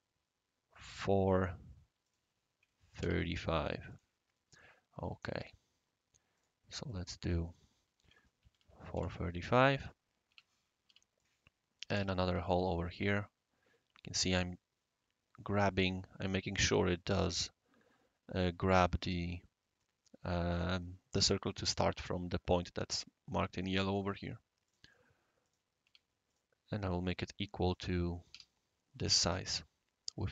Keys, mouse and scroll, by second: 2.0 click, 3.0 ctrl+c, 3.9 click, 5.4 click, 6.3 click, 6.8 click, 7.6 click, 8.0 4, 8.5 ctrl+v, 8.9 Return, 10.3 Escape, 10.8 c, 11.1 click, 11.9 Escape, 12.2 c, 13.3-13.7 scroll up 1, 13.7 scroll down 1, 13.7-14.1 scroll up 1, 24.6 click, 25.4 click, 25.8 Escape, 26.3 click, 27.6 click, 28.3 e, 29.4 scroll down 1, 29.5 scroll up 1, 29.5 scroll down 2, 30.2-30.3 right drag.